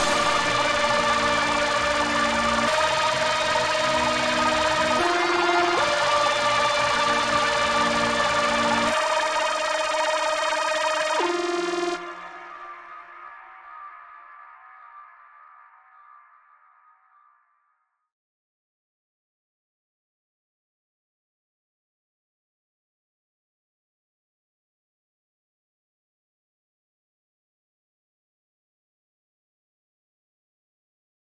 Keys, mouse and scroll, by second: 0.0 scroll down 2, 0.2 Tab, 0.6 ctrl+r, 2.6 Escape, 2.7 Tab, 4.0 click, 5.0 click, 6.0-8.6 drag, 7.9-8.3 scroll down 1, 10.0 click, 11.4 `, 11.7-12.1 scroll up 1, 12.1 `, 12.5 scroll down 1, 12.9 click, 13.3 Tab, 14.0 z, 14.3 click, 15.2 g, 17.7 right click, 18.4 o, 27.6 click, 27.7 right click, 28.0 Tab, 28.2-31.3 middle drag, 28.5 z, 28.8 scroll up 2, 31.1 ctrl+z.